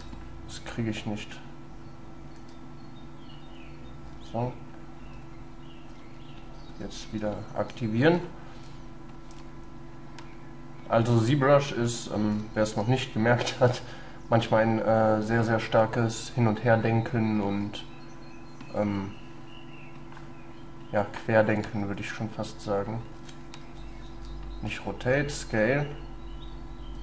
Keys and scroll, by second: 2.4 x, 4.2 x, 6.0 x, 23.7 ctrl+z.